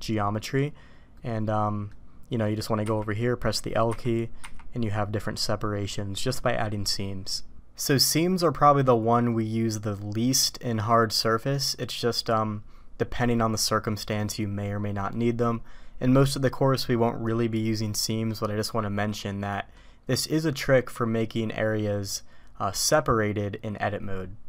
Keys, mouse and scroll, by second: 1.1 middle click, 2.4 middle click, 2.8 l, 3.8 l, 4.4 l, 5.6 middle click, 11.4 middle click, 19.4 middle click.